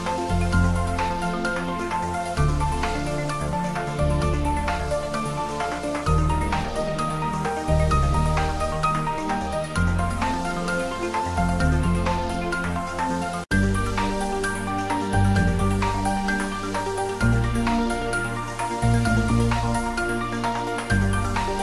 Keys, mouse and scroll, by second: 0.9 g, 2.8 shift+click, 3.9 click, 4.5-5.8 typing, 5.4 click, 8.0 click, 9.3 r, 10.3 click, 11.1 shift+click, 11.6 g, 13.7 click, 14.9 f, 15.4 g, 15.9 click, 16.3 r, 17.1 click, 17.5 g, 18.8 click, 19.0 scroll down 1, 19.2 middle click, 20.3 scroll up 1, 20.5 middle click, 21.1 scroll up 1, 21.3 click, 21.5 scroll down 1.